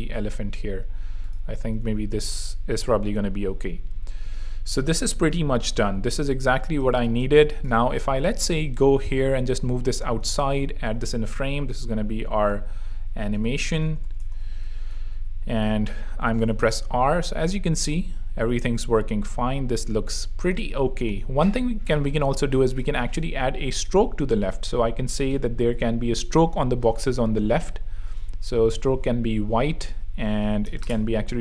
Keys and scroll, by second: 7.3 space, 7.7 v, 8.4 alt+v, 10.3 alt+super+g, 10.9 alt+super+r, 13.0-14.5 typing, 14.7 super+3, 15.1 super+r, 15.8 r, 16.5 r, 20.3 super+2, 28.2 f, 28.8 Tab, 30.3-31.1 typing.